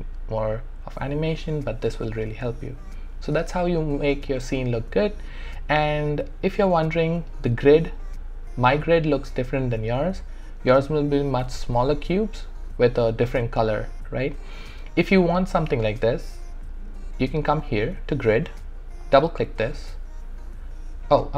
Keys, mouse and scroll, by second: 19.0 click, 21.1 right click.